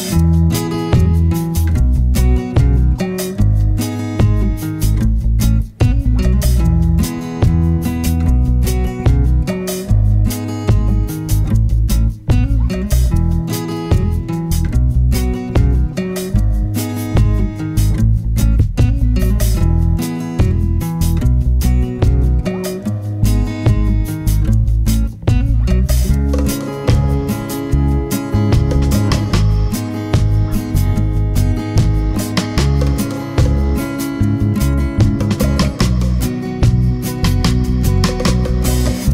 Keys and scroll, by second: 15.1 super+a.